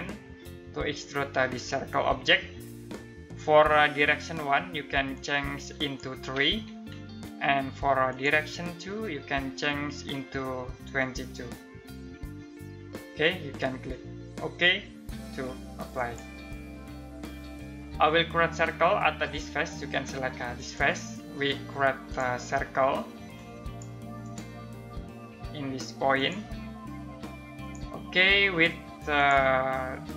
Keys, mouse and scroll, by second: 4.7 click, 6.2 3, 7.6 click, 15.5 click, 20.1 click.